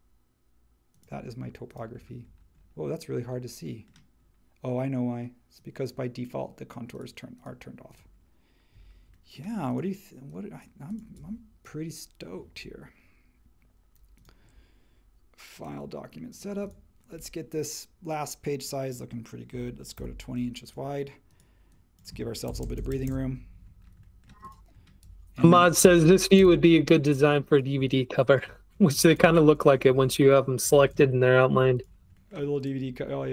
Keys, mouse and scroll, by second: 19.5-19.9 typing, 22.4 shift+Right, 22.6 shift+Right, 22.7 shift+Right, 22.9 shift+Right, 23.0 shift+Right, 25.8 shift+Right, 25.9 shift+Right, 26.3 shift+Right, 29.1 shift+Up, 29.4 shift+Right, 29.9 shift+Up, 30.8 shift+Up.